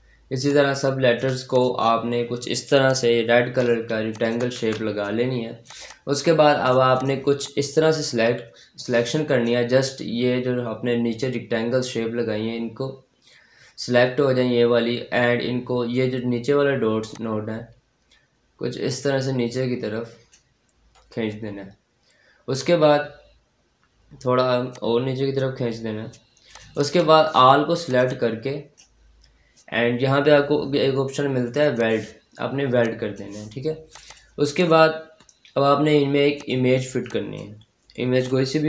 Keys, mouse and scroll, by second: 0.3 shift+click, 1.7 scroll down 1, 2.7 click, 3.7 scroll up 1, 4.0 click, 4.4 ctrl+z, 4.9-5.5 scroll down 1, 5.5-12.0 drag, 12.0-12.9 scroll down 1, 12.9-14.7 scroll up 1, 17.0-20.6 drag, 20.6-22.4 scroll down 1, 23.9-24.6 scroll up 1, 24.6 click, 25.5 scroll down 1, 26.3 click, 27.3-27.7 scroll up 1, 27.7-31.3 drag, 31.6 click, 32.2-32.7 scroll up 1, 33.0 click, 33.3-33.8 scroll down 1, 33.8 click, 36.6-36.9 scroll up 1, 36.9 click.